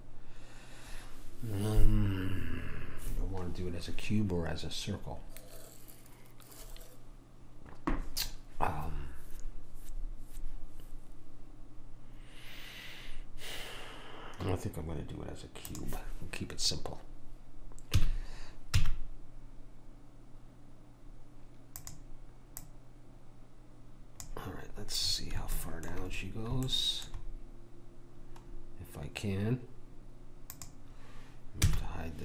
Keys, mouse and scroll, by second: 18.0 s, 22.6 click, 25.0-25.6 scroll up 1, 25.6-27.0 middle drag, 30.5 click, 31.7 h.